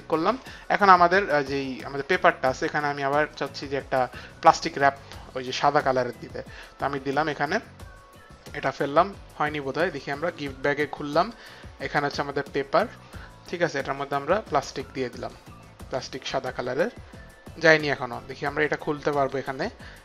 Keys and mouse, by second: 4.7 click, 9.9 click, 10.4 click, 11.8 click, 14.4 click, 19.1 click.